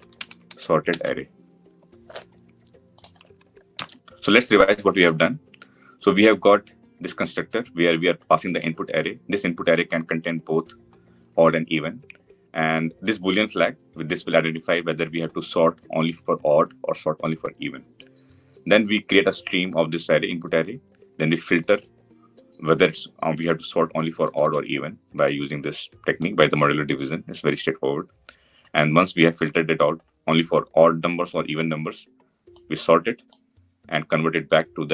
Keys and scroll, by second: 0.7 Return, 3.6 ctrl+alt+l.